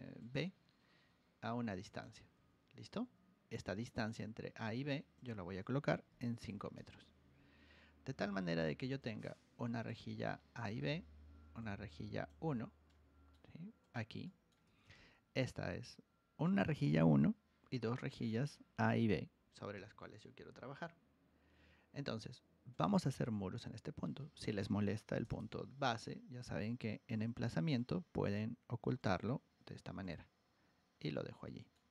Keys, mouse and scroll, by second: 0.1 click, 1.8 click, 2.1 Escape, 2.3 Escape, 2.9 Escape, 3.9 click, 5.1 click, 8.9-9.8 drag, 10.5 click, 11.5 click, 12.8 middle click, 13.8 click, 14.2 middle click, 14.6 Escape, 14.8 Escape, 22.7 click, 23.9 middle click, 25.1 v, 25.3 v, 27.1 click, 27.7 click, 28.9 click, 30.0 click, 30.8 middle drag, 31.4 middle click.